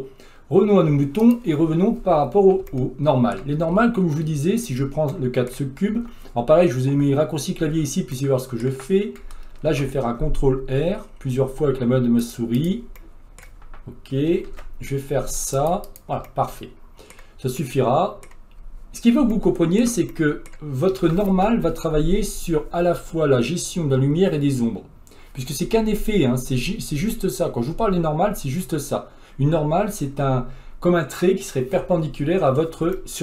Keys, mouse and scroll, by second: 1.3 click, 2.7 shift+middle click, 3.7-4.7 scroll up 8, 4.7 click, 5.1 middle click, 5.9 Tab, 8.3-9.7 middle drag, 9.7 ctrl+r, 13.0-14.5 middle drag, 14.5 ctrl+r, 16.3-20.6 middle drag, 20.6-21.0 scroll up 1, 21.0 Tab, 32.5-32.9 scroll down 2, 32.9-33.2 shift+middle drag.